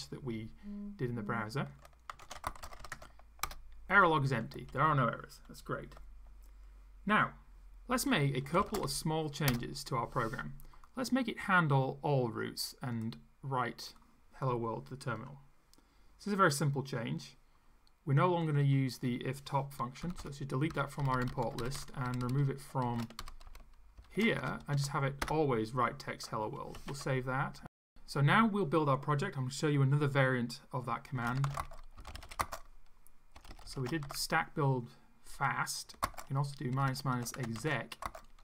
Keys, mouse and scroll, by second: 1.9-3.2 typing, 3.4 Return, 8.2-9.3 typing, 9.5 Return, 12.9-14.1 drag, 18.5 click, 20.0 Delete, 21.0 Down, 21.6 ctrl+Right, 22.9 ctrl+Right, 24.0 ctrl+shift+Left, 24.4 ctrl+shift+Delete, 24.7 ctrl+shift+End, 25.2 BackSpace, 26.8 ctrl+s, 30.9-34.5 typing, 36.0-38.4 typing.